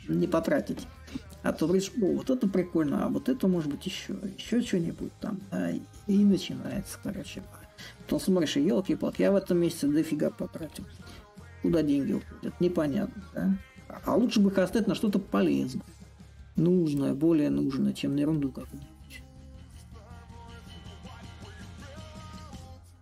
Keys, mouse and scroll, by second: 0.0-8.1 drag, 8.6-10.3 drag, 10.3 a, 14.8-16.3 drag, 17.2-22.2 drag.